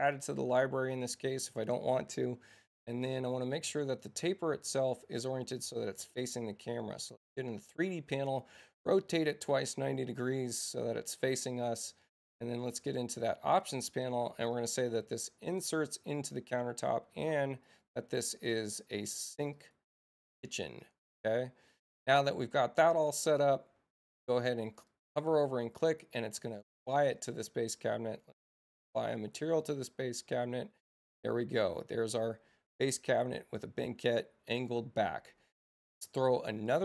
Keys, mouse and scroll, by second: 0.1 click, 3.8-4.8 drag, 6.6 click, 8.4 click, 8.6 click, 9.7 click, 12.8 click, 15.1 6, 16.2 click, 17.6 click, 19.5 click, 22.1 click, 24.9 click, 26.9 space, 28.3 click, 28.9 click, 36.7 right click.